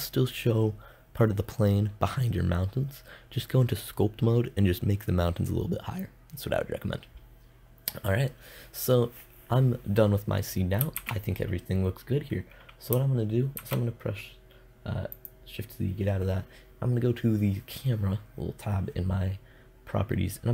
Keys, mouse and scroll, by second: 10.4 shift+z, 13.0 shift+z.